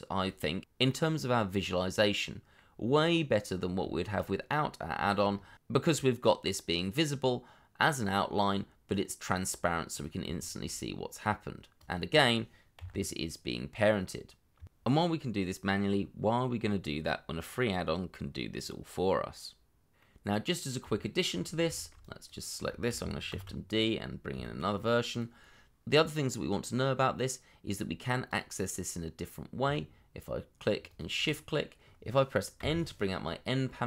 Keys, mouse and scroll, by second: 2.8-3.8 scroll down 1, 3.9 shift+middle click, 5.0 shift+middle click, 5.3-5.7 scroll up 1, 6.4 middle click, 10.7 shift+middle click, 12.7 g, 14.5 Escape, 20.0 middle click, 21.0 shift+middle click, 21.5 scroll down 1, 21.7 shift+middle click, 22.7 shift+middle click, 23.3 shift+d, 24.3 x, 26.2-26.6 scroll up 1, 28.6 shift+middle click, 29.0-29.4 scroll up 1, 29.4 middle click, 30.9 shift+click.